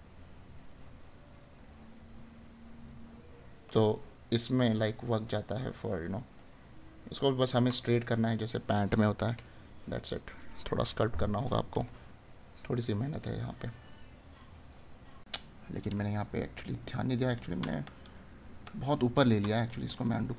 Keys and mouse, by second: 1.4 right click, 5.9 right click, 17.1 right click.